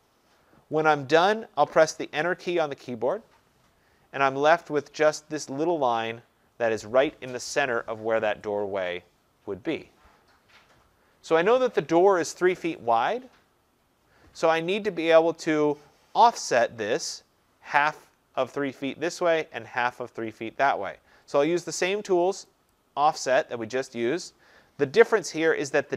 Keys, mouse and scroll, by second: 3.0 Return, 4.8 Return, 5.5 click, 7.3 Escape, 17.2-22.3 drag, 22.8-25.9 drag.